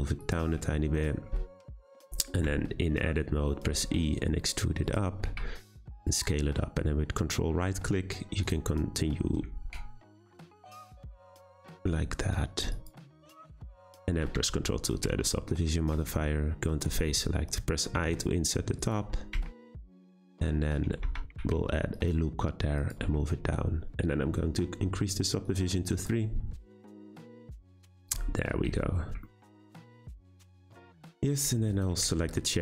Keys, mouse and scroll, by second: 1.0-2.4 scroll up 2, 2.4 Tab, 3.7 e, 5.3 s, 8.4 ctrl+right click, 9.6 s, 11.2 ctrl+right click, 11.8 s, 12.9 Tab, 13.6-14.3 middle drag, 14.3 ctrl+2, 14.8 scroll up 2, 15.0 Tab, 15.5 middle click, 16.0 3, 16.7 click, 18.0 i, 19.3 Tab, 19.7-21.0 middle drag, 21.0 Tab, 21.4 r, 23.0 Tab, 25.4-26.7 drag, 27.0 click, 27.2-27.9 right drag, 27.9 click, 28.1-28.7 scroll down 9, 28.8-31.3 shift+middle drag, 31.3 click, 31.7 shift+click, 32.1-32.6 shift+middle drag.